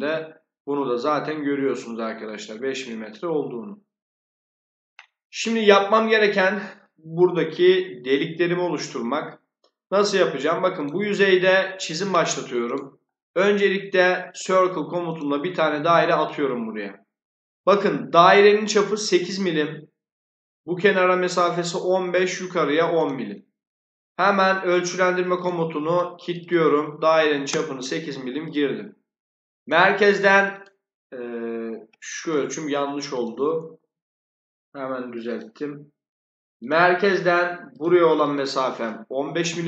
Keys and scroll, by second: 27.1 8, 27.4 Return, 32.1 Escape, 32.2 `, 33.4-34.1 typing, 39.0-39.6 typing.